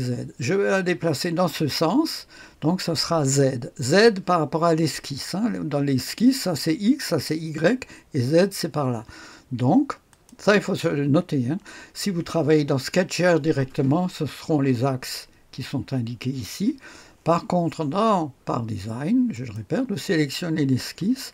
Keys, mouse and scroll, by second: 10.0 click, 19.2 click.